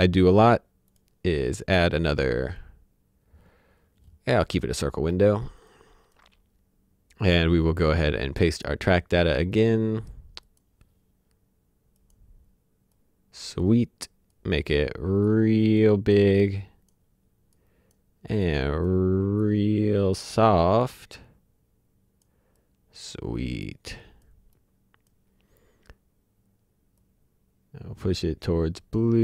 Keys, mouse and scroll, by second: 0.9 click, 4.5 click, 5.0-5.6 scroll down 1, 5.6 click, 8.5 click, 13.1 click, 27.1 click.